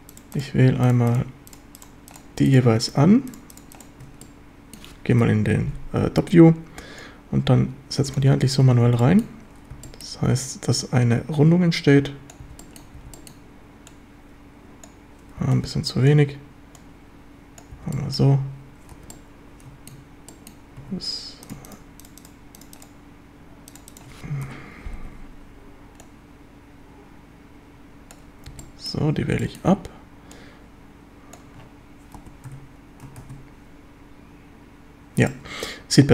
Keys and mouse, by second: 4.2-4.8 drag, 5.2 KP_7, 7.1-8.2 drag, 8.5 z, 8.9 b, 9.7 b, 10.8-12.3 drag, 13.0 b, 13.9 click, 15.4 b, 16.8 click, 19.0 z, 19.1-19.9 middle drag, 20.3 middle click, 20.8 a, 24.5 KP_7, 25.0 z, 26.0-28.1 drag, 28.5 b, 29.2 b, 30.3-31.4 drag, 32.2 z, 32.5 Tab, 33.3 ctrl+s, 35.3-36.1 drag.